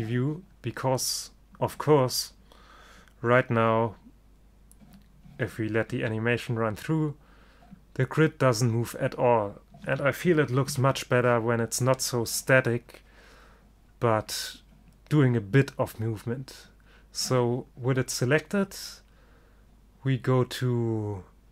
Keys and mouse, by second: 6.1 alt+a, 10.0 alt+a, 10.8 ctrl+shift+….